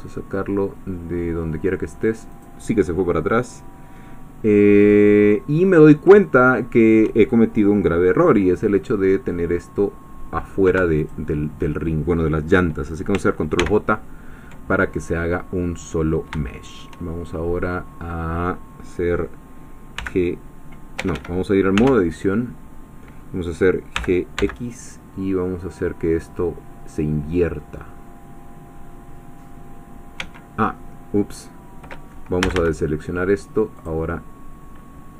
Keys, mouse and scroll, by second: 2.3-4.0 drag, 4.0-4.4 scroll down 1, 5.6-6.1 scroll up 1, 6.2-7.5 shift+middle drag, 11.1 shift+click, 13.6 ctrl+j, 15.4 scroll down 2, 16.0-16.3 scroll up 2, 16.4 shift+middle click, 20.0 g, 21.0 Escape, 22.0 Tab, 23.9 g, 24.4 x, 30.4 Escape, 32.4 a, 33.9 click.